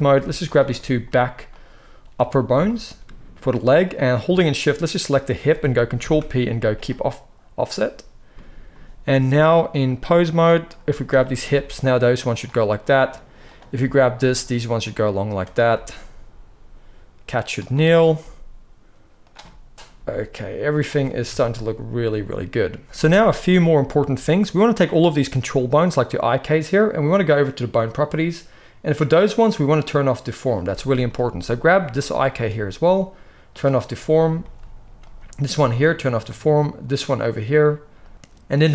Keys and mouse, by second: 0.1 alt+a, 0.5-1.5 middle drag, 1.5 shift+click, 2.0 middle click, 4.8 shift+click, 5.9 ctrl+p, 9.2-11.1 drag, 11.1-17.0 middle drag, 11.4 r, 13.7 r, 15.6 r, 17.6 click, 18.1 g, 19.9 g, 21.2 KP_3, 23.8-24.7 shift+middle drag, 24.7 click, 24.9-29.4 middle drag, 29.4 click, 29.6-32.2 middle drag, 32.2 click, 32.3-33.4 middle drag, 33.4 click, 33.5-35.8 middle drag, 35.8 click, 36.0-37.9 middle drag, 37.9 click, 38.0-38.6 middle drag, 38.6-38.7 drag.